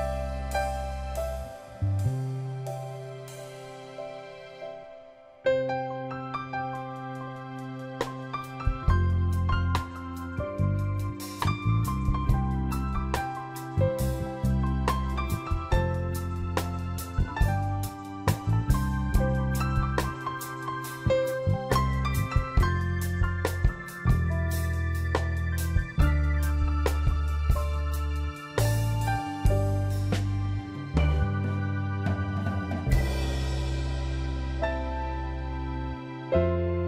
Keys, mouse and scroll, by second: 9.4 ctrl+i, 12.2 ctrl+click, 14.5 ctrl+t, 15.3 alt+click, 15.9 alt+click, 22.1 Down, 23.6 Down, 23.9 Down, 24.1 Down, 28.8 scroll up 2, 29.9 scroll up 1, 30.0 ctrl+j, 30.8 right click, 33.5 ctrl+click.